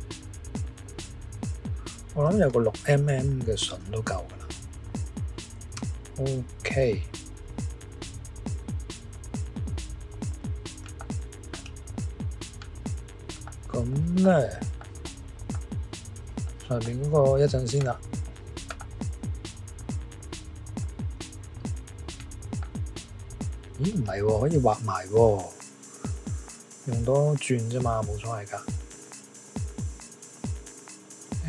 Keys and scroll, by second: 3.6 6, 5.7 Return.